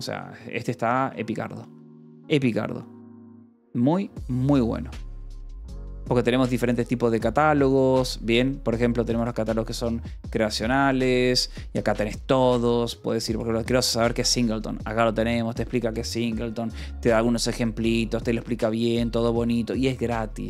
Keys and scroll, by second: 0.3 ctrl+=, 1.3 j, 1.8 k, 2.7 j.